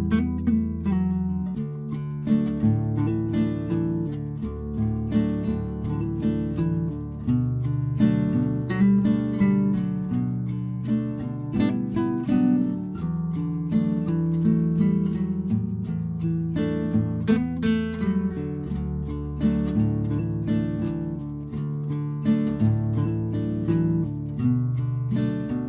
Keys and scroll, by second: 7.5 ctrl+g.